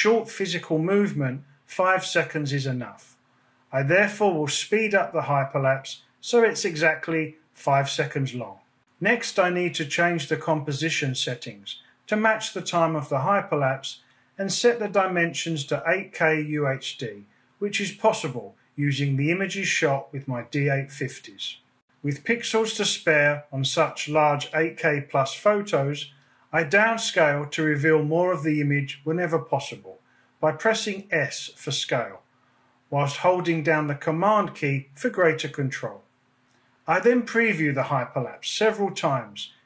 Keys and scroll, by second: 7.4 BackSpace, 7.7 0, 13.0 super+k, 16.5 BackSpace, 17.6 5, 18.1 shift+;, 18.4 shift+0, 26.1 s, 36.7 space.